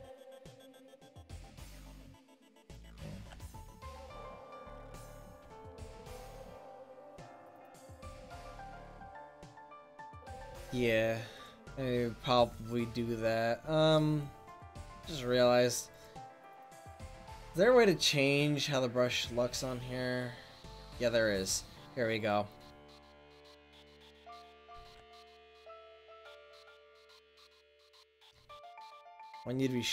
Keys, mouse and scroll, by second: 0.4 ctrl+z, 1.0 ctrl+z, 1.6 ctrl+z, 2.3 ctrl+z, 3.1 ctrl+z, 4.4 ctrl+z, 5.0 ctrl+z, 5.5 ctrl+z, 6.0 ctrl+z, 6.4 ctrl+z, 6.8 ctrl+z, 7.2 ctrl+z, 7.7 ctrl+z, 22.4-25.0 drag, 25.0 ctrl+z, 26.4 f.